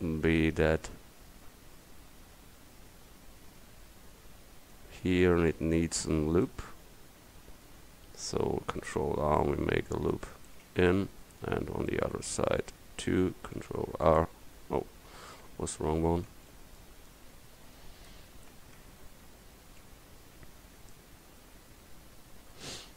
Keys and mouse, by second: 0.1 middle click, 6.7-9.0 middle drag, 9.0 ctrl+r, 13.6 ctrl+r.